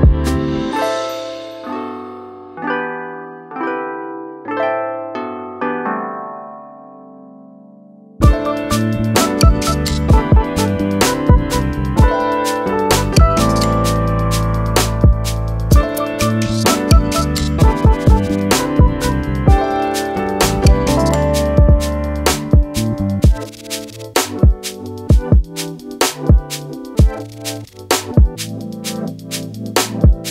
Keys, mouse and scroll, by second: 0.6 alt+click, 1.0 click, 1.4 click, 8.0 click, 9.4 click, 10.2-10.5 alt+scroll up 2, 10.5 click, 12.0 z, 12.5 right click, 13.0 click, 13.8-14.3 scroll down 1, 14.3 click, 18.3 alt+scroll down 1, 18.6-19.4 alt+scroll up 2, 19.4 click, 19.6-19.9 alt+scroll down 2, 19.9 click, 21.1 alt+shift+click, 22.2 click, 23.9 alt+scroll up 2, 24.4 click, 26.2-26.5 alt+scroll down 2, 27.2 click, 28.5 alt+scroll down 1, 28.9 alt+scroll up 1, 29.2 click, 30.2 alt+scroll down 1.